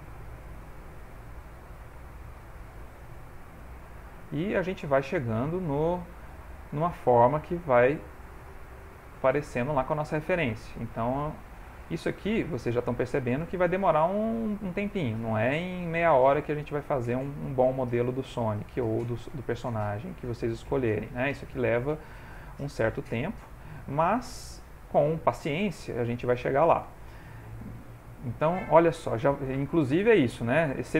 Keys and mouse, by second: 1.0 click, 3.0 click, 3.5 click, 4.1 click, 5.3-6.0 shift+click, 5.7 shift+click, 6.2 middle click, 7.4 shift+click, 8.0 shift+click, 8.5 shift+click, 8.7 shift+click, 9.2 middle click, 11.2 click, 12.1 shift+middle click, 12.7 ctrl+middle click, 13.2 shift+middle click, 13.9 click, 15.2 click, 16.2 click, 18.0 click, 18.2 middle click, 19.4 click, 20.3 click, 21.7 middle click, 22.8 click, 24.2 shift+click, 24.9 click, 25.3 shift+click, 25.9 shift+click, 26.3 shift+click, 27.0 shift+click, 27.7 ctrl+middle click, 28.1 middle click, 28.8 middle click, 29.2 ctrl+middle click, 29.6 click.